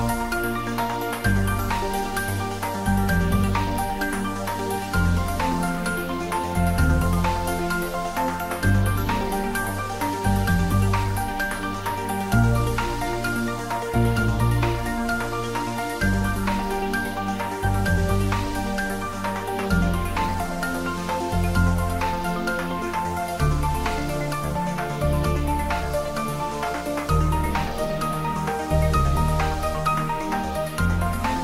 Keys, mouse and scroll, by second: 0.0-0.1 typing, 0.7 click, 1.5 middle click, 2.4 click, 3.8 ctrl+middle click, 4.0-5.2 shift+middle drag, 5.2 g, 5.8 y, 6.5 Right, 7.8 Return, 8.2-9.2 typing, 10.1 click, 10.5 Tab, 11.0 click, 12.9 Tab, 13.1-14.1 typing, 13.9 click, 14.2 Tab, 14.8-20.8 shift+drag, 20.8 Tab, 22.2 click, 22.9-23.9 typing, 24.6 click, 25.4 ctrl+3, 25.9 ctrl+middle click, 26.5-28.0 shift+middle drag, 28.0 click, 28.6 Tab, 30.2 click.